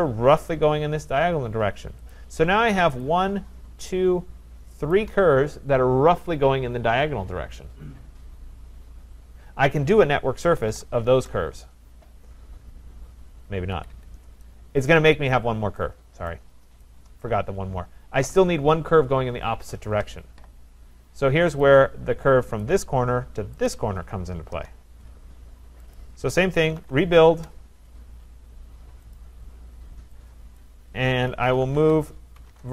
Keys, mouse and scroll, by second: 2.1 click, 3.0 click, 3.7-4.4 typing, 3.9 shift+click, 4.0 shift+click, 5.0 click, 10.2-11.2 typing, 13.5-14.3 typing, 14.9 right click, 15.3-16.3 scroll, 16.3 right click, 17.2 right click, 17.6-18.6 scroll, 18.6 scroll, 21.6 click, 22.6 click, 23.7 click, 24.5 Return, 26.0 click, 26.7-27.3 typing, 29.2 click, 30.6 click, 31.1-32.7 typing.